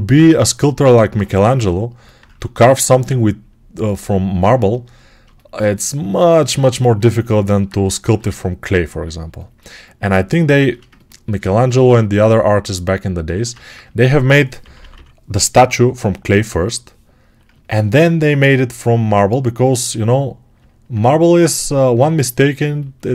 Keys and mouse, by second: 4.4-23.1 right drag, 8.0 g, 13.4 ctrl+z, 14.4-20.4 drag, 14.5 ], 14.7 ].